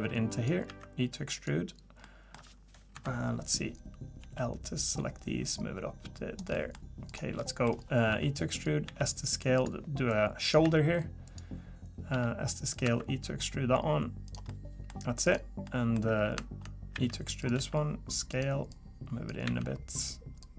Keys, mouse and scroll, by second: 0.7 e, 2.0 middle click, 2.9 KP_3, 4.2 l, 5.4 click, 6.5 middle click, 7.1 click, 7.4 middle click, 8.1 e, 8.8 s, 10.1 click, 10.6 e, 12.1 s, 12.8 e, 14.5 middle click, 15.2 click, 15.6 middle click, 16.9 e, 17.5 s, 18.7 click, 19.4 e, 20.4 click.